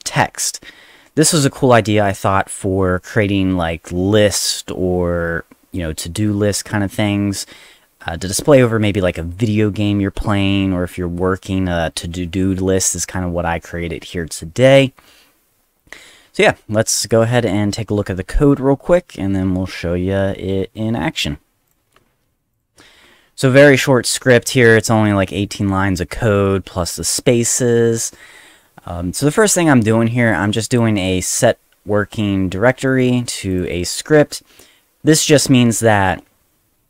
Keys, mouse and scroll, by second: 17.0 click, 21.7 click, 22.5 click, 30.5 click, 30.7 click, 33.5 click, 33.6 click, 35.3 click.